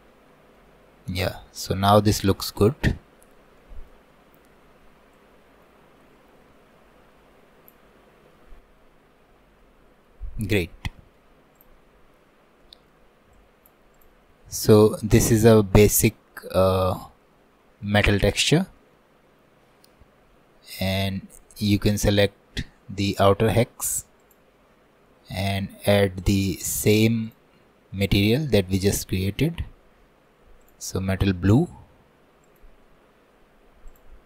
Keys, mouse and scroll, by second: 0.8 scroll down 1, 1.1-5.2 middle drag, 5.2-8.0 drag, 8.0-9.2 middle drag, 8.0-8.4 scroll up 2, 9.2-9.6 scroll down 1, 9.6 middle click, 10.3 scroll down 2, 11.0 shift+middle click, 11.6 click, 11.9-12.6 scroll down 11, 12.6 middle click, 13.4 click, 14.8-19.2 middle drag, 19.2-20.8 scroll down 2, 20.8-22.1 scroll down 1, 22.1-23.1 scroll down 1, 23.1-24.4 drag, 24.4-25.5 scroll down 1, 25.5-26.9 scroll down 1, 26.9-28.4 scroll down 1, 28.4-29.8 scroll down 1, 29.8-30.7 scroll down 1, 30.7-34.2 drag.